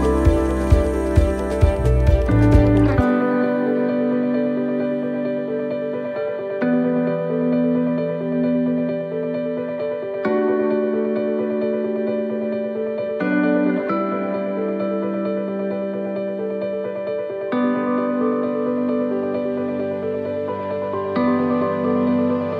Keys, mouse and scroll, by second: 0.0 right click, 1.0-3.0 typing, 4.5 click, 5.2 click, 6.5 right click, 7.4 click, 12.6 right click, 13.8 click, 20.7 scroll down 2, 21.2 middle click, 22.2 scroll up 2.